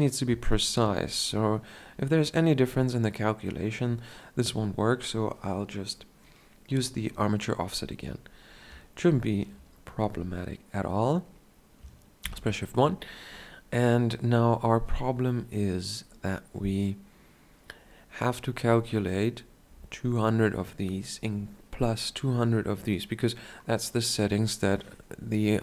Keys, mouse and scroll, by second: 12.4 shift+1, 15.5-25.6 middle drag.